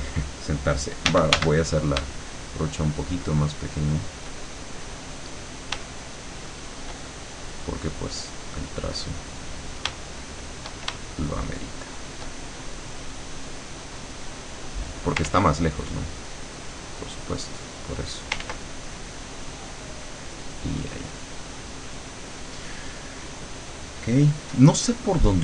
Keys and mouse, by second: 1.1 d, 2.5-4.2 shift+drag, 4.9 click, 5.9-7.1 shift+drag, 7.2 shift+click, 8.4-9.5 drag, 9.9 shift+click, 11.1-12.3 shift+drag, 12.7 shift+click, 13.8 click, 15.3 ctrl+z, 16.1 click, 17.6 click, 18.5 ctrl+z, 18.9 ctrl+click, 19.9 click, 20.7-22.4 drag.